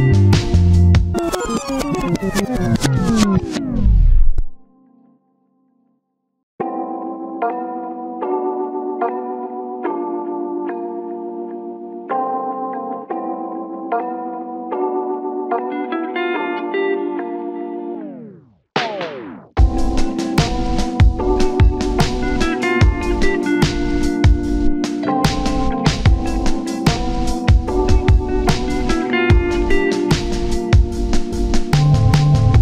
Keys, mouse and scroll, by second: 1.5-2.1 scroll up 1, 2.2-3.1 scroll down 1, 3.6-4.0 scroll up 1, 7.9 7, 8.4-8.8 scroll up 1, 9.1 alt+z, 9.2 alt+z, 12.4 double click, 12.6 alt+z, 13.5 double click, 14.7 scroll up 1, 14.9 shift+middle click, 17.0 alt+z, 18.7 double click, 19.5 ctrl+z, 20.9 double click, 21.2-21.5 scroll down 1, 21.5 1, 22.6 double click, 22.8 scroll down 1, 23.9 shift+middle click, 26.2 double click, 26.7 scroll down 1, 29.2 typing, 29.6 scroll up 1, 32.0 alt+z, 32.0 alt+z.